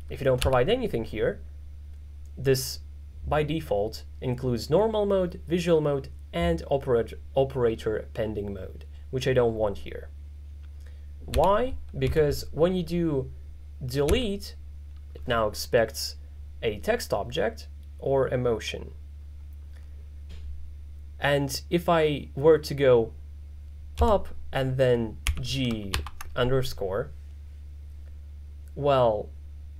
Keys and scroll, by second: 0.5 x, 11.4 u, 12.1 k, 14.2 d, 24.0 k, 25.3 g, 26.0 shift+-.